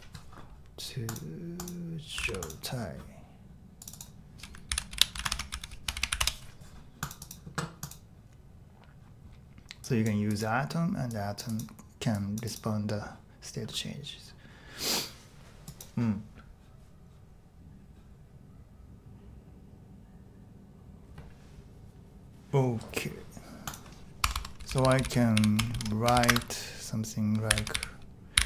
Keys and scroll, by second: 0.0-0.1 typing, 4.7 super+k, 4.9 i, 5.1 super+v, 5.3 Escape, 5.5 j, 6.1 w, 6.2 Return, 24.2 Tab, 24.3 Tab, 24.4-28.4 typing.